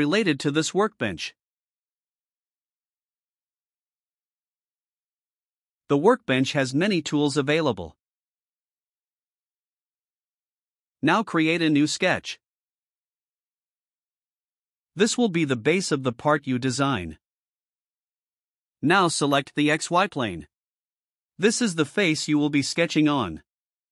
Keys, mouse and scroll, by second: 17.3 click, 21.0 click.